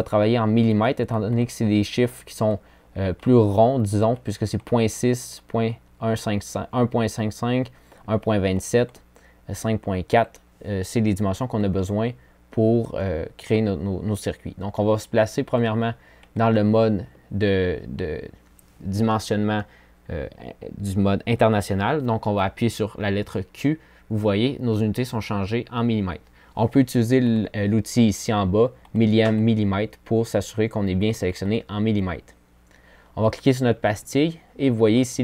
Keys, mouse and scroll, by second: 8.4 click, 19.7 q.